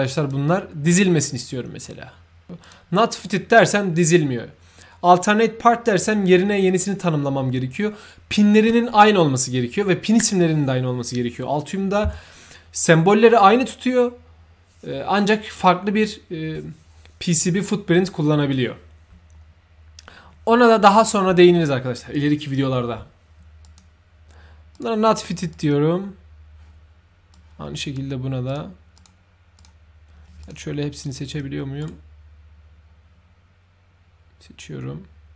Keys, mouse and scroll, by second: 0.2 shift+click, 1.8 shift+click, 2.6 shift+click, 3.1 shift+click, 23.6 shift+click, 24.7 shift+click, 25.5 shift+click, 27.3-27.9 shift+drag, 29.0 shift+click, 29.6 shift+click, 30.4 shift+click, 31.0 ctrl+shift+click, 31.8 ctrl+right click.